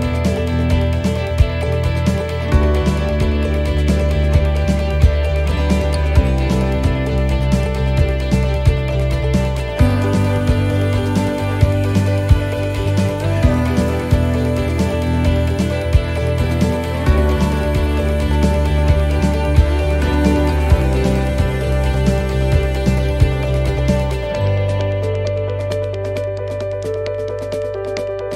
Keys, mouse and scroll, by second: 1.4 click, 2.5 right click, 3.8 l, 6.2 click, 8.4 middle click, 9.6-10.2 scroll up 3, 10.2 shift+middle click, 11.0 right click, 11.9 l, 17.3 click, 19.0 right click, 19.6 l, 21.8 click, 24.0 middle click, 24.9 scroll down 2, 25.5 middle click, 25.5-27.1 scroll down 6, 27.2 click.